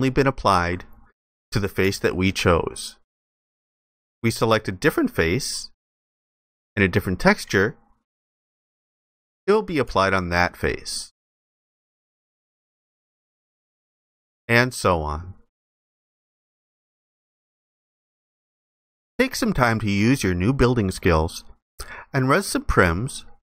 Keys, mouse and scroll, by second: 1.7 alt+click, 9.5 alt+click.